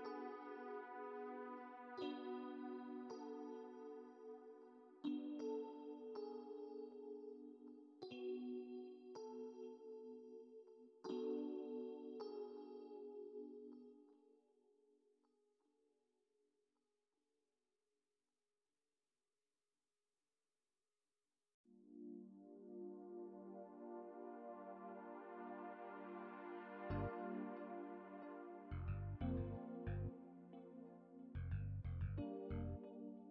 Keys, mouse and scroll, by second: 1.0 click, 3.0 click, 3.8 click, 5.7 click, 6.5 click, 8.3 F2, 21.7 n, 23.7 click, 27.1 click.